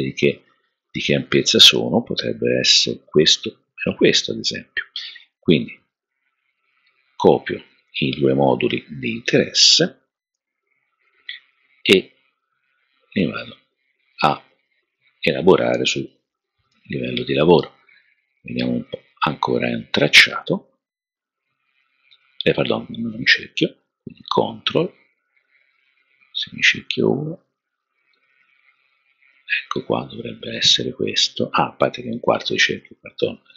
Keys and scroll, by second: 10.3 super+c, 16.7 alt+super+v.